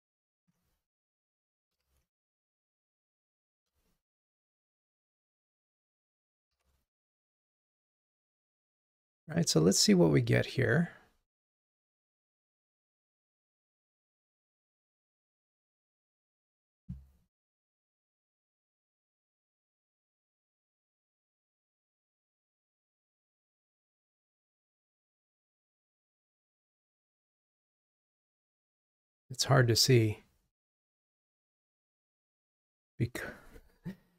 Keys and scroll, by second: 6.0 super+/, 6.7 ctrl+r.